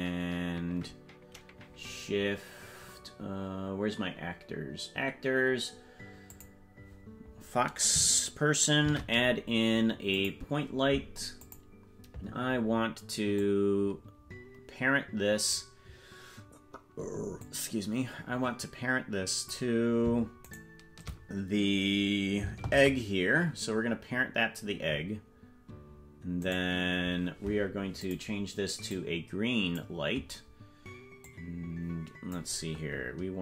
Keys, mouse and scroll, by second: 6.3 click, 8.8 shift+a, 11.4 click, 13.3-15.7 drag, 17.4-19.6 drag, 20.6 shift+right click, 22.6 ctrl+p, 26.5 right click, 28.0 click, 31.2-32.4 drag.